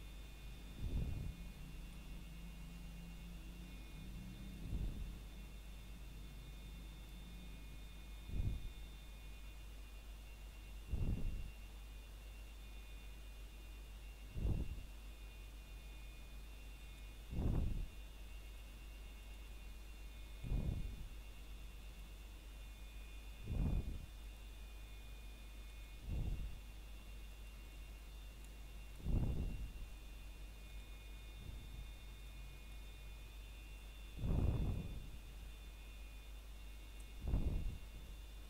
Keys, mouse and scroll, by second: 1.2 Escape, 3.6 o, 9.2 r, 10.5-11.9 scroll down 1, 13.3 Escape, 14.0 middle click, 15.0-15.8 scroll up 1, 17.9 middle click, 20.9 r, 24.1 click, 28.4 scroll down 1, 30.0 middle click, 30.5-31.1 scroll up 1, 31.1 middle click, 31.6 scroll up 1, 37.8 ctrl+Tab.